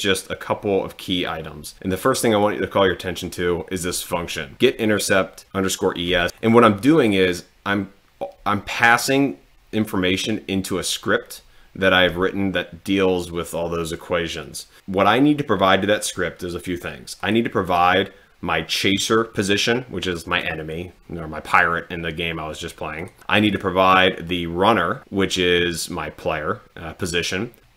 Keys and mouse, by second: 2.4 click, 6.9 click, 17.2 click, 17.7 click, 23.0 click, 23.5 click.